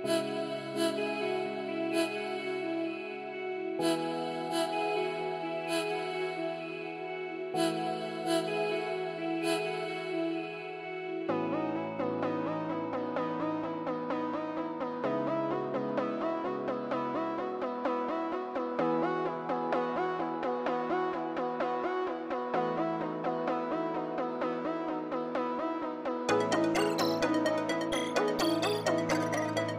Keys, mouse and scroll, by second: 3.0 scroll down 1, 3.3 middle click, 3.9 scroll up 1, 4.4 scroll up 1, 4.6 scroll down 1, 5.0 middle click, 6.7 scroll down 1, 6.7 middle click, 8.1-8.6 scroll up 1, 9.0 middle click, 9.9-11.7 scroll down 1, 16.4 scroll down 1, 16.4 middle click, 17.9 scroll down 1, 18.1 middle click, 19.1 scroll down 1, 20.1-20.6 scroll up 1, 20.9 right click.